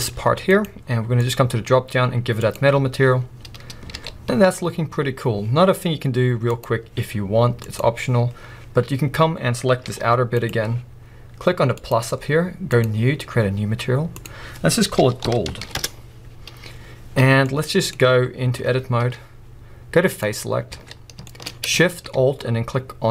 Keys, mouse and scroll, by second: 0.0 g, 1.7-7.3 drag, 3.9 alt+a, 4.5 scroll up 2, 9.4 scroll down 1, 9.9 g, 10.4 right click, 11.9-18.0 drag, 15.8 Return, 18.0-20.1 middle drag, 18.3 scroll up 2, 18.6 Tab, 18.9-19.8 scroll up 2, 19.8-20.1 scroll up 1, 20.1 click, 20.8 alt+a, 21.2-23.1 shift+middle drag, 21.6-22.3 scroll up 2, 22.3-23.1 scroll up 1.